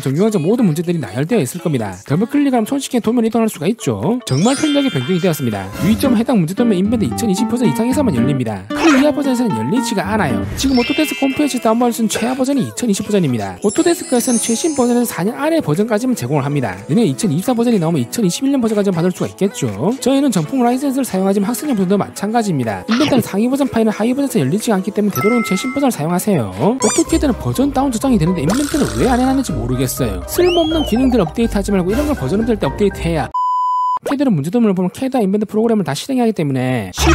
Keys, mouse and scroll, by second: 3.0 click, 3.2 click, 4.3 click, 4.5 click, 5.5 click, 5.8 click, 7.0 click, 7.2 click, 8.5 click, 8.7 click, 9.3 click, 9.5 click, 12.1 click, 15.5 click.